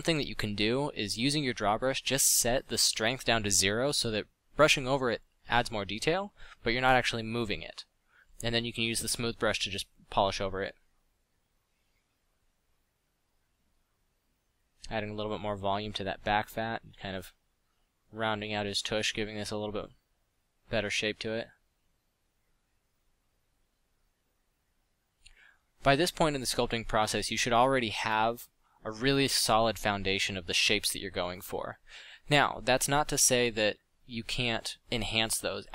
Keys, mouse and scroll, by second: 0.0 f, 3.2 click, 3.7 f, 4.2 f, 25.1 f, 26.1 f, 27.5 f, 30.5 f, 33.7 f.